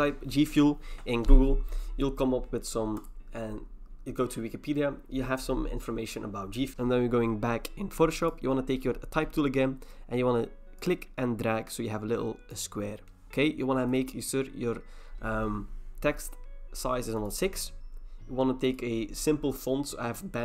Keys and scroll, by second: 6.7 ctrl+c.